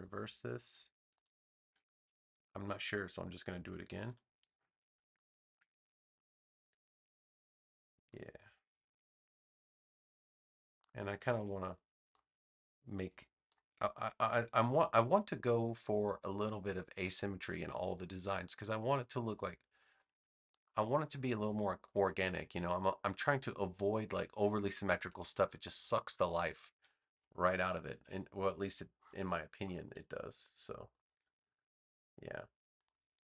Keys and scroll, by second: 2.3 BackSpace, 4.0 super+j, 11.3 a, 18.1 space.